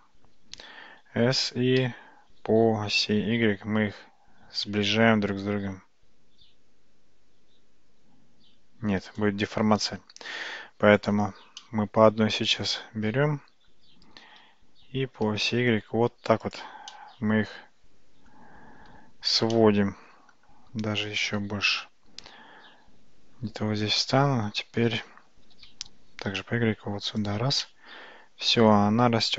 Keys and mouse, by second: 0.6 s, 11.7-13.1 middle drag, 15.3 g, 16.9-18.4 middle drag, 19.6 middle click, 21.4 g, 25.5 g, 27.7-29.3 middle drag.